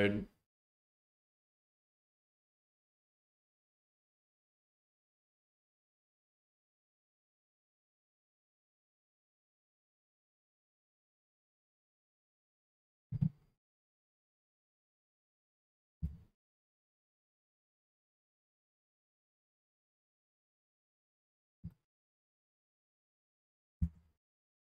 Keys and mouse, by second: 0.6 g, 0.7 z, 2.5-3.5 drag, 4.2 g, 4.3 x, 5.7 g, 5.8 x, 6.8 click, 7.4 click, 8.0 g, 8.1 x, 12.1 click, 14.7 click, 15.8 g, 16.0 z, 18.3 click, 18.8 middle click, 21.7 shift+middle click, 22.8 click, 23.8 g, 23.9 y.